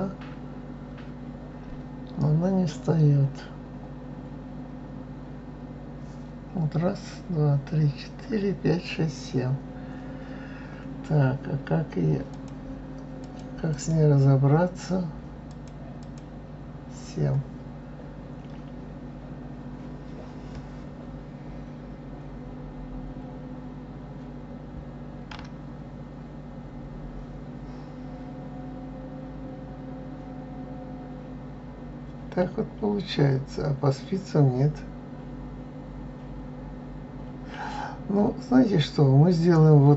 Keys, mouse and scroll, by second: 12.3 click, 13.7 click, 15.5-16.8 drag.